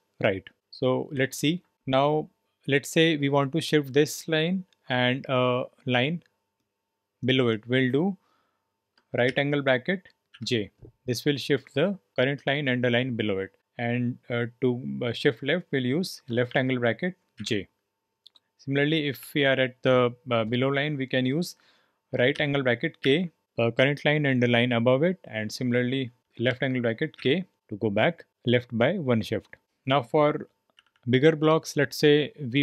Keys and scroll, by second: 9.2 shift+., 10.3 j, 16.4 shift+,, 17.3 j, 19.1 j, 22.3 shift+., 23.0 k, 26.2 j, 26.5 shift+,, 27.1 k, 30.8-32.6 typing.